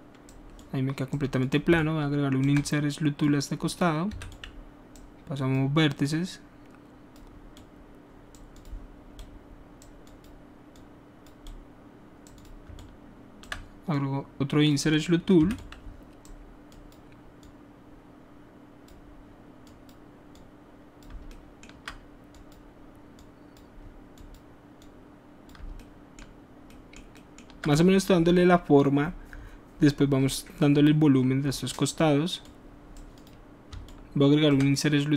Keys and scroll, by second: 4.1 w, 15.4 w.